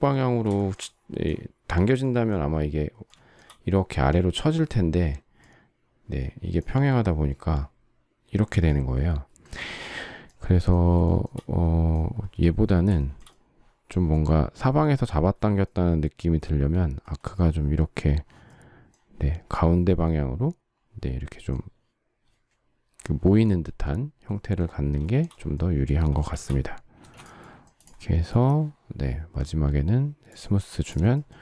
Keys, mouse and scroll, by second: 0.5 shift+middle click, 11.0 shift+middle click, 12.9 shift+middle click, 25.1 shift+middle click, 26.2 shift+c, 26.9 space, 31.2 shift+middle click.